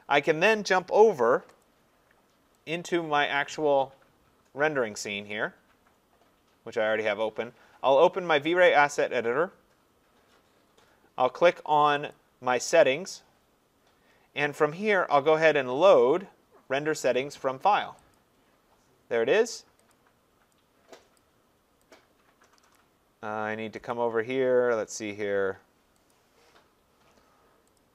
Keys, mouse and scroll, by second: 1.6 click, 2.8 click, 8.6 click, 12.1 click, 18.1 click, 19.9 click, 21.2 click, 22.8 click, 23.9 click, 26.1 click, 27.8 click.